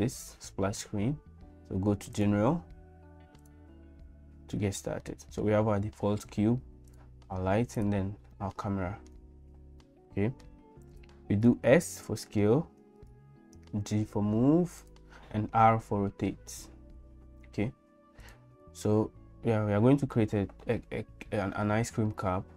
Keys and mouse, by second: 5.0 middle click, 6.9 click, 7.8 click, 8.4 middle click, 9.8 middle click, 11.6 s, 13.8 g, 15.3 r.